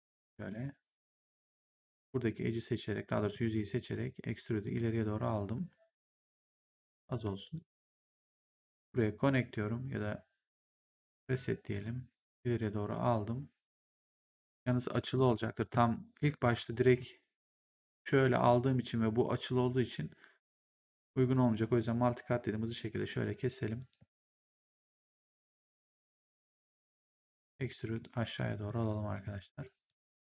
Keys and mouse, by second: 0.9 w, 1.2 right click, 1.8 click, 3.1 click, 4.5 click, 7.4 right click, 7.8 click, 11.1 click, 11.6 w, 12.3 click, 15.0 ctrl+z, 16.3 ctrl+z, 21.4 click, 23.7 ctrl+click, 24.0 w, 25.4 right click, 25.8 click, 27.2 click, 27.7 w, 28.6 click, 29.7 right click.